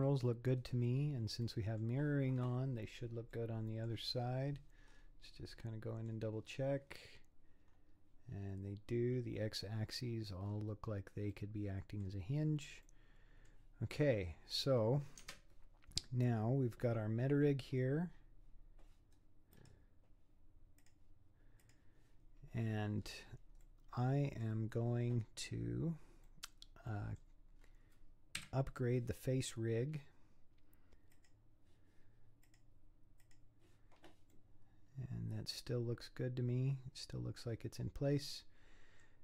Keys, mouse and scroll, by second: 0.7-1.5 scroll down 8, 1.5-2.8 middle drag, 2.8-3.4 scroll up 7, 3.4 middle click, 4.1-4.8 scroll down 7, 4.8-5.6 scroll up 8, 5.6 middle click, 6.4-6.9 scroll down 4, 6.9-9.4 scroll up 9, 9.8-11.3 scroll down 16, 11.3-12.3 middle drag, 12.3 scroll up 1, 12.4 scroll down 5, 12.9-14.0 middle drag, 14.0-14.5 scroll up 7, 14.5 scroll down 3, 15.2 Tab, 16.3-19.4 scroll up 6, 19.6-21.6 right drag, 21.6 click, 23.0-23.6 scroll down 5, 23.6-27.6 middle drag, 27.6-28.4 scroll up 6, 28.4 KP_3, 31.1-34.3 drag, 34.3-37.4 middle drag, 37.8-38.3 scroll down 4, 38.4-39.2 middle drag.